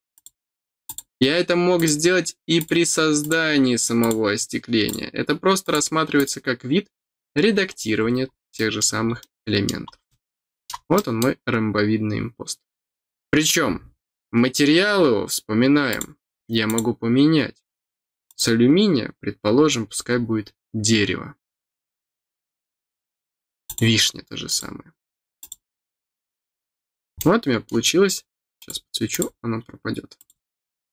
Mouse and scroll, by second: 0.1 click, 0.8 click, 1.7 click, 2.5 click, 3.2 click, 3.9 click, 4.8 click, 5.6 click, 6.1 click, 8.0 middle click, 8.5 middle click, 9.1 middle click, 10.0-15.8 middle drag, 15.8 click, 16.6 click, 18.2 click, 19.5-20.3 scroll down 1, 20.4 scroll down 1, 21.6 scroll down 1, 22.7 scroll down 2, 23.6 click, 24.4 click, 25.3 click, 26.5 scroll down 1, 27.1 middle click, 28.5 click, 29.1 click, 30.1 click.